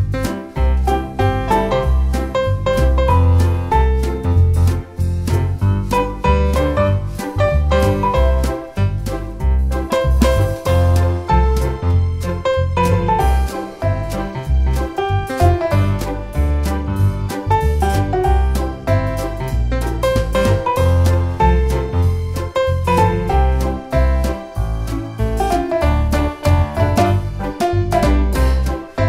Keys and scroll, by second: 0.1 8, 0.5 Return, 11.2 3, 11.4 Return, 14.9 l, 15.0 space, 16.3 Escape, 16.5 space, 17.1 Escape, 17.3 space, 19.6 6, 19.8 Return, 20.1 Escape, 21.8 Escape, 24.2 1, 24.4 Return, 24.9 Escape, 27.9 space.